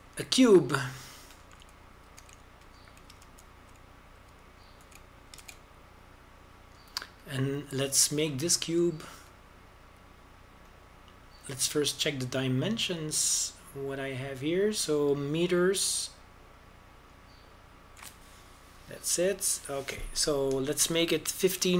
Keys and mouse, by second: 1.0 shift+a, 3.7 shift+s, 4.9 shift+s, 7.1 shift+a, 10.6-12.4 drag, 14.3-18.8 drag.